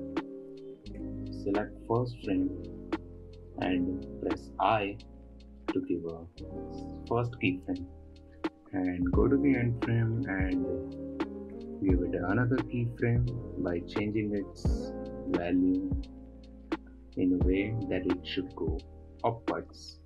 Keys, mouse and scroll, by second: 1.5 typing, 8.2-11.2 drag, 13.3-16.6 drag.